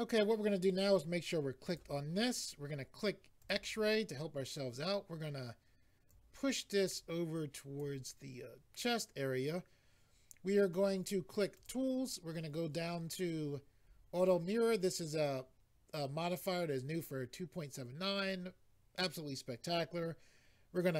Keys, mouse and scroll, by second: 1.7 click, 3.4 click, 6.1 click, 11.6 click, 12.8-13.8 scroll down 4, 14.3-14.7 scroll down 1.